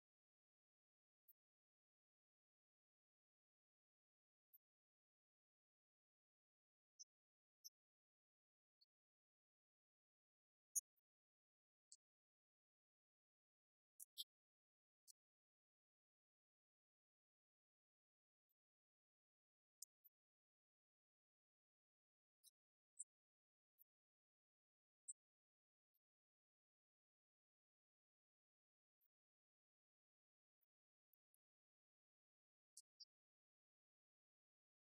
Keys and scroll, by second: 0.1 1, 0.3 Return, 0.7 Up, 2.6 Right, 3.5 Left, 9.3 Right, 11.6 Left, 13.5 Right, 15.4-16.5 typing, 16.6 Caps_Lock, 16.7 shift+Down, 17.3 ctrl+d, 17.5 Up, 19.0 Down, 28.1 Right, 28.3 Left, 31.0 Right, 32.5 Left, 33.2 Right, 34.1 Left.